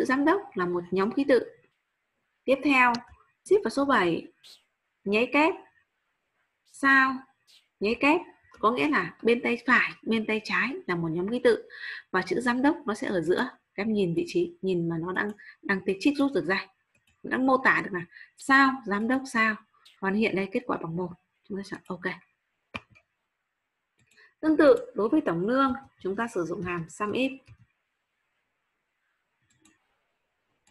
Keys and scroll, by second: 3.8 shift+7.